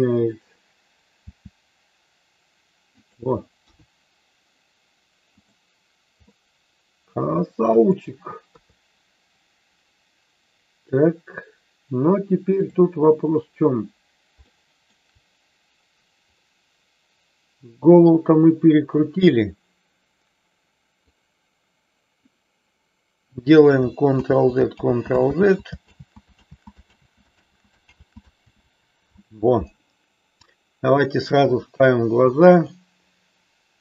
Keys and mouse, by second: 1.2 r, 3.6 KP_1, 6.4-7.8 middle drag, 8.5 KP_3, 14.5 shift+middle click, 19.0-21.1 drag, 24.1 ctrl+z, 24.7 ctrl+z, 25.9 ctrl+z, 26.5 ctrl+z, 27.0 ctrl+z, 27.3 ctrl+z, 28.0 ctrl+z, 28.5 ctrl+z, 30.6-31.4 drag, 32.6-33.8 drag.